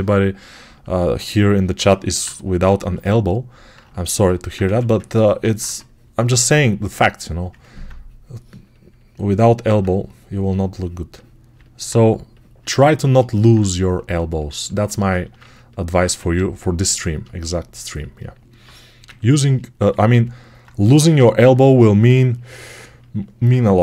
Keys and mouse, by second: 0.5-4.0 alt+drag, 4.0-17.8 alt+right drag, 4.5 1, 5.5 2, 15.9 1, 17.8-20.1 alt+shift+drag, 19.8 alt+q, 20.7 g.